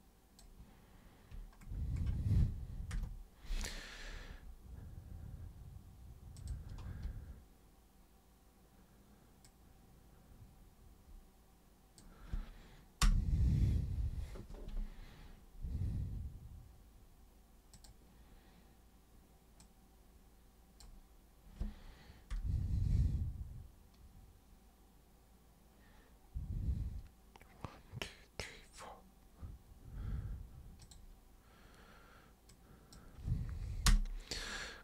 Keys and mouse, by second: 2.9 super+Return, 6.4 super+click, 9.5-12.0 super+drag, 13.0 super+Return, 17.8 super+click, 19.6-20.8 super+drag, 22.3 super+Return, 30.8 super+click, 32.5 super+click, 33.9 super+Return.